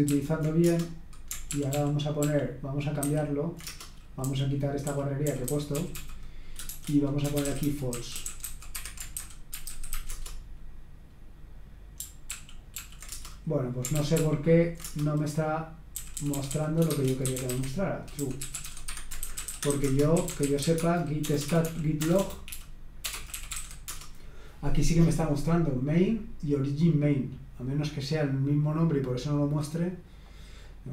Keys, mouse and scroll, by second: 0.1 ctrl+p, 0.7 Return, 1.5 ctrl+p, 1.7 ctrl+p, 2.2 ctrl+p, 3.0 ctrl+n, 3.6 Return, 4.2-10.2 typing, 12.3 ctrl+p, 12.8 ctrl+p, 13.1 Return, 13.9 ctrl+p, 14.2 ctrl+p, 14.8 Return, 15.9-22.0 typing, 23.3-24.6 typing, 30.6 click.